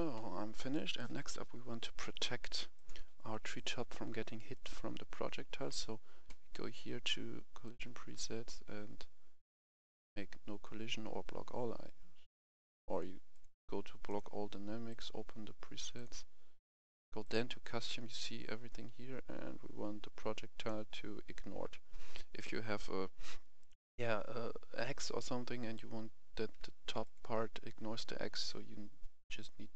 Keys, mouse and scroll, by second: 0.7 right click, 1.6-2.7 scroll down 1, 2.7 click, 5.2 click, 5.7 scroll down 1, 7.6 click, 15.5 scroll down 1, 16.0 click, 25.5 click.